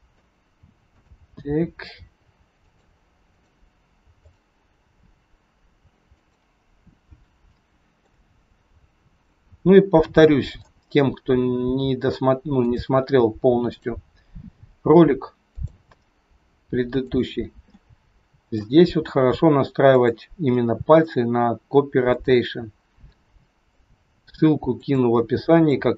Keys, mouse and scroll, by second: 0.9 click, 1.6 r, 3.2 click, 4.2 click, 4.7 r, 6.6 scroll up 2, 7.5 shift+middle click, 9.1 click, 10.0 middle click, 11.2 r, 13.6 click, 14.4 r, 15.8 middle click, 17.0 click, 17.7 middle click, 18.7 r, 20.5 middle click, 22.0 click, 23.1 middle click, 23.8 r, 25.1 middle click.